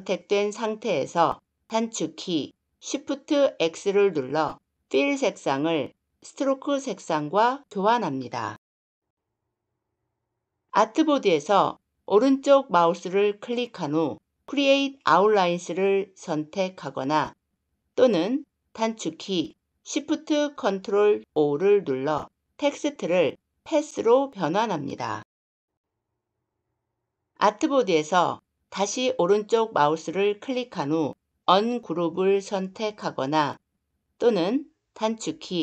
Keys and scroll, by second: 2.7 shift+x, 19.7 ctrl+shift+o.